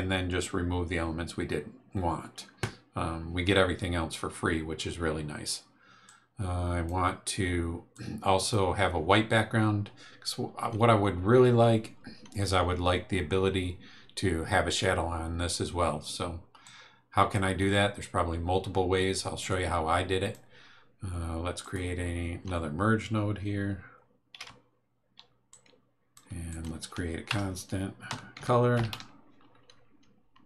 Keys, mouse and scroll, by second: 6.0-7.0 drag, 7.9 click, 16.6 click, 19.5-20.5 drag, 21.6 click, 24.3 m, 25.5 click, 26.5 click, 27.3 Tab, 27.8-29.4 typing.